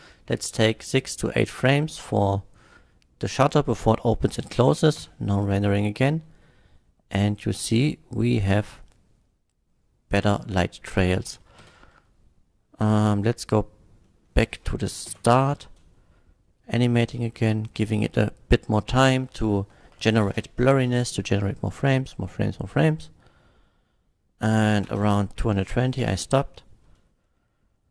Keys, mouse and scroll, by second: 0.1 KP_8, 5.1 F12, 10.3 click, 10.9 click, 11.6 shift+Left, 13.4 click, 14.1 middle click, 15.1 shift+Left, 15.6 space, 24.9 space, 26.0 F12.